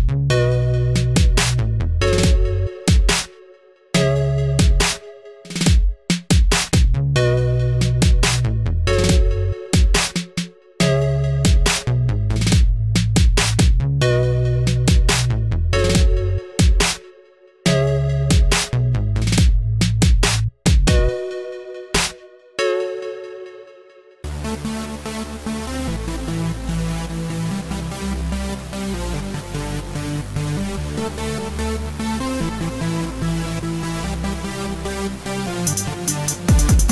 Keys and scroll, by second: 1.5 ctrl+c, 1.9 ctrl+v, 4.9-5.8 typing, 13.5 Left, 13.6 BackSpace, 14.0 9, 14.6 1, 14.7 Delete, 18.9 ctrl+t, 20.7 Return, 29.5 BackSpace, 29.9 0, 31.0 Delete, 31.3 BackSpace, 31.5 Left, 31.6 9.